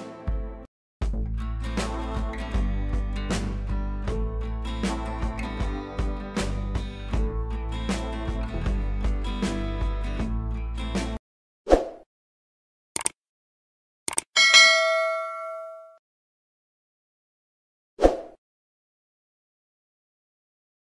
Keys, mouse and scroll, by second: 0.1-1.5 drag, 2.2 right click, 2.9 click, 5.1 right click, 6.5 click.